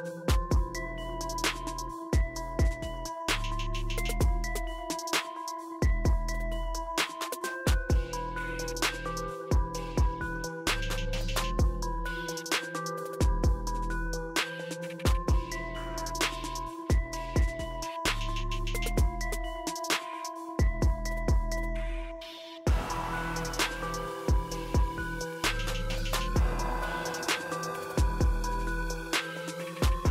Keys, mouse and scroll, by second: 2.2-3.7 drag, 6.8-7.3 drag, 8.6-9.1 typing, 9.1-9.6 drag, 13.9 click, 19.9-23.6 drag, 21.3-22.2 typing, 23.9 click, 24.2-25.8 typing, 27.3-27.6 typing, 27.6 click.